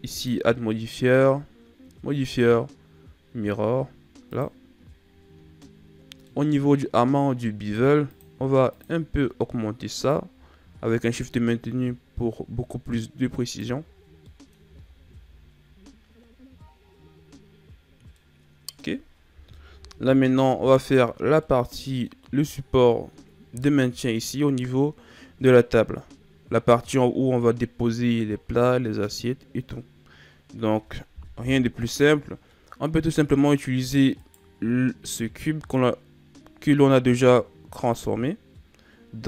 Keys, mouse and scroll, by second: 5.5-6.3 middle drag, 6.3-8.0 scroll up 3, 8.0-13.0 drag, 13.8-14.2 scroll down 4, 14.2-14.6 middle drag, 14.6 a, 18.0-19.7 middle drag, 19.7 KP_1, 20.7-21.3 shift+scroll up 2, 21.3-24.3 middle drag, 25.5-28.3 middle drag, 28.3-30.3 scroll up 2, 30.4-31.3 scroll down 1, 31.3 KP_1, 34.1 right click, 37.8 click.